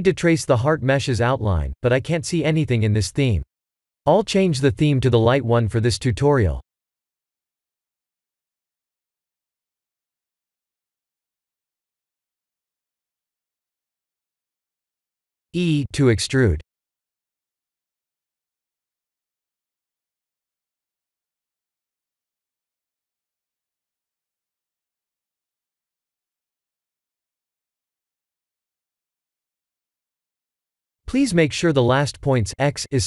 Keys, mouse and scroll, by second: 0.5 g, 2.7 shift+middle click, 4.7 shift+z, 8.0 click, 14.6 Tab, 15.6 e, 20.5 e, 23.0 shift+middle click, 24.1 e, 26.0 shift+middle click, 26.6 e, 28.9 e, 31.4 n, 32.0 n, 32.7 click.